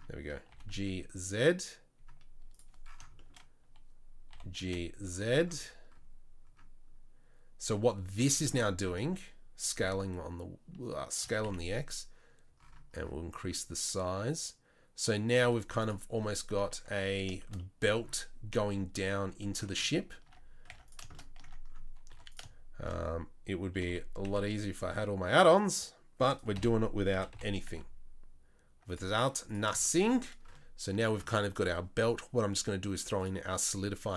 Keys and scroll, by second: 0.5 g, 4.3 g, 8.9 s, 11.2 s, 15.5 z, 16.9 Tab, 20.3 Tab, 20.7 Tab, 21.5 Tab, 22.1 2, 23.7 g, 26.6 o, 27.1 g, 29.2 Tab.